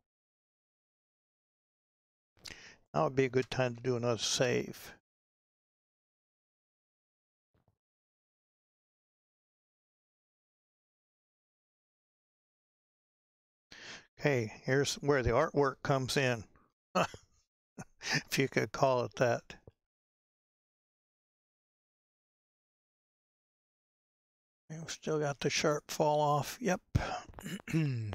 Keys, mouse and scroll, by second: 4.6 ctrl+shift+s, 9.5-11.7 drag, 11.7-12.4 scroll up 4, 12.4-17.8 scroll up 1, 21.1-28.1 drag.